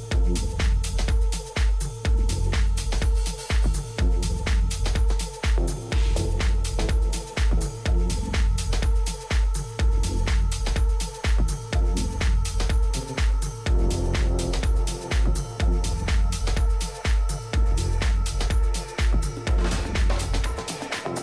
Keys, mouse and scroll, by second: 1.5-4.5 middle drag, 4.5 Tab, 5.6-10.1 middle drag, 15.0 middle click, 17.1-19.0 right drag, 17.8 Tab, 18.5 Tab, 19.2 Tab, 20.1-21.2 right drag, 20.8 Tab.